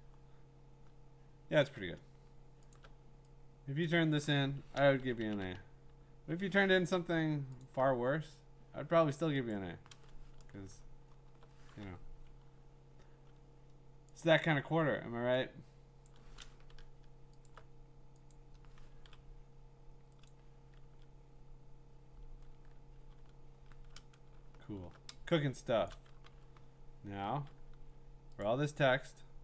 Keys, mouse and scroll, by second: 1.0 scroll, 2.7 alt+click, 3.9 click, 4.7 ], 5.0 ], 5.2 ], 5.3 ], 7.6 alt+click, 9.5 click, 10.4 ctrl+z, 10.9-11.5 scroll, 14.2 click, 16.1 click, 17.5 alt+click, 18.3 click, 19.0 ctrl+z, 20.3 click, 20.8 ctrl+z, 23.1-23.7 scroll, 24.4 scroll, 25.6-25.9 scroll, 25.9 click, 26.3 v, 28.4 click.